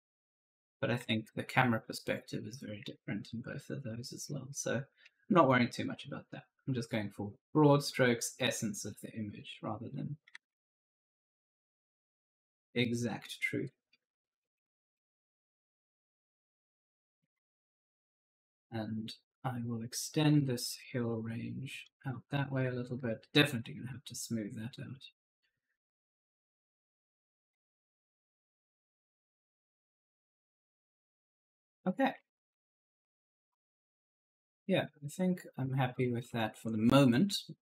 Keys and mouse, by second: 2.7 alt+Tab, 3.8 right click, 4.2 right click, 5.4 click, 7.8 click, 9.3 click, 10.2 ctrl+z, 11.2 click, 12.9 click, 14.3 click, 15.7 right click, 16.4 click, 16.9-18.3 typing, 17.0 right click, 17.5 right click, 18.9 click, 20.4 click, 22.2 right click, 23.3 click, 25.5 right click, 25.6 d, 25.9 click, 27.1-28.3 typing, 27.1 right click, 27.7 right click, 28.3 click, 30.8-36.8 typing, 31.0 right click, 35.7 right click.